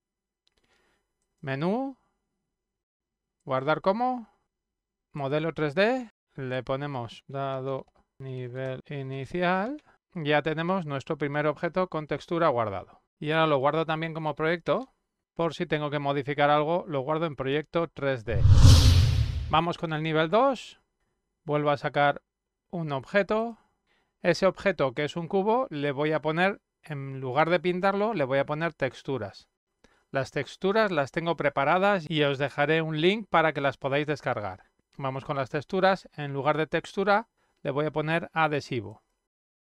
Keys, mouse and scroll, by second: 1.5 click, 4.1 click, 5.7 click, 7.1 click, 7.4 click, 7.9-11.6 typing, 11.7 click, 12.9 d, 13.5 d, 15.3 n, 15.7 l, 18.0 click, 19.5 click, 22.3 click, 23.5 click, 38.2 click.